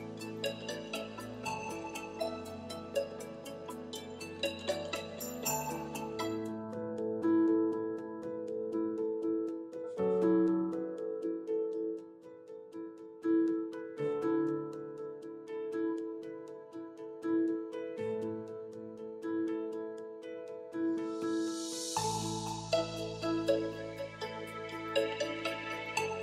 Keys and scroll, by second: 16.4 0, 16.6 Home.